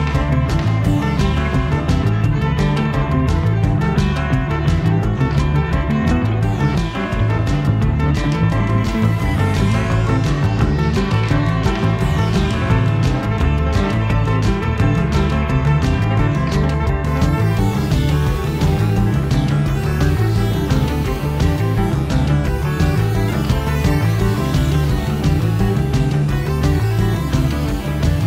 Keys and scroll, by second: 0.6 a, 2.6 super+j, 9.0 v, 11.1 i, 12.2 v.